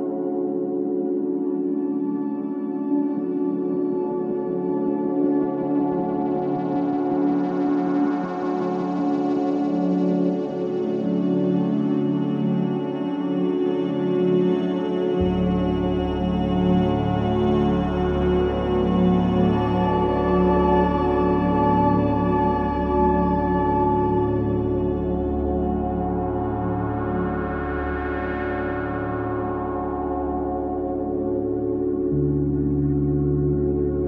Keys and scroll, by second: 26.7 ctrl+i, 28.6 space, 33.8 space.